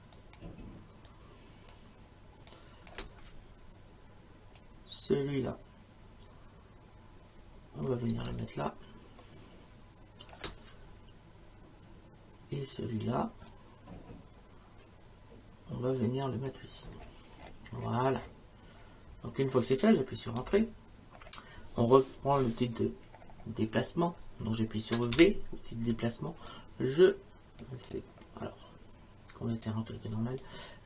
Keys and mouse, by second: 0.1 click, 0.1 space, 1.1 click, 2.5 click, 4.6 click, 8.3 space, 8.4 click, 10.3 space, 13.5 click, 20.4 Return, 20.4 KP_Enter, 25.1 v, 26.5 click, 27.9 click, 29.5 click.